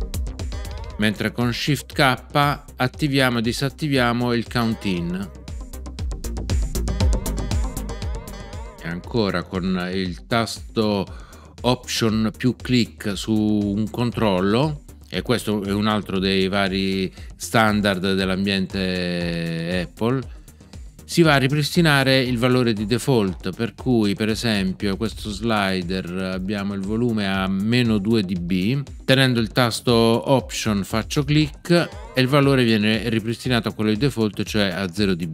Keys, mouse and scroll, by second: 4.5 shift+k, 8.3 shift+k, 31.7 alt+click.